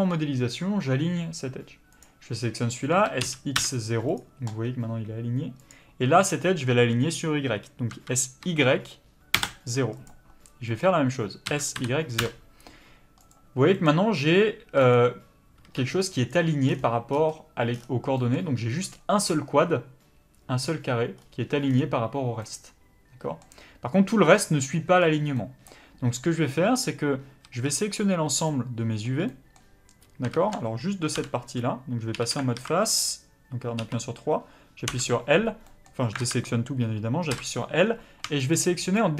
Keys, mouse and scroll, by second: 2.0 click, 3.0 s, 4.2 click, 8.0 s, 10.1 click, 11.5 s, 13.3 click, 16.3 b, 26.5 middle click, 27.4 a, 28.5 middle click, 30.3 ctrl+z, 31.1 l, 32.1 3, 32.5 alt+a, 34.9 l, 35.4 scroll up 1, 35.6 middle click, 36.2 alt+a, 37.3 l, 37.9-38.5 scroll up 1, 38.5 shift+click.